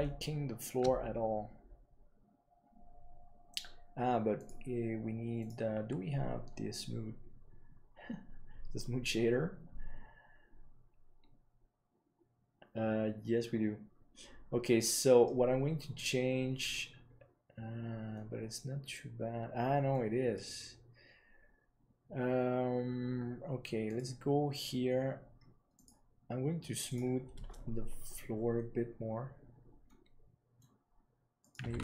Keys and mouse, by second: 23.8 click, 25.7-28.8 drag, 29.8-30.5 middle drag, 31.3-31.8 drag.